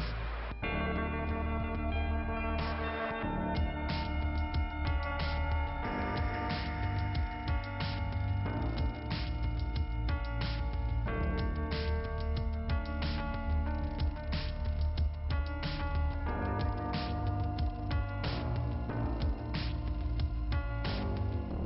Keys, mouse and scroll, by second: 0.0-1.1 scroll up 2, 1.1 click, 1.2 scroll up 1, 1.2 click, 2.0 click, 3.1 click, 3.2 click, 3.6 click, 4.2 click, 4.7 click, 4.9 click, 5.0 double click, 6.1 double click, 6.8 click, 7.6 scroll down 2, 12.3 click, 13.4-13.7 scroll down 2, 16.7 click, 17.2-18.4 scroll up 2, 18.9 click.